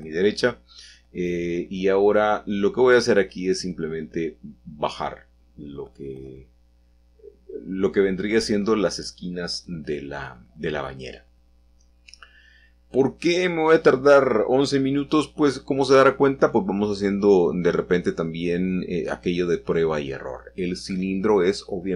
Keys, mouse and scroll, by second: 0.1 ctrl+z, 1.2 shift+click, 4.0 shift+click, 4.7 ctrl+z, 4.9-6.1 middle drag, 6.1 shift+click, 7.5 shift+click, 11.5-12.5 drag, 12.5 shift+middle click, 13.2-14.3 shift+middle drag, 17.7 shift+a, 20.9-21.9 drag.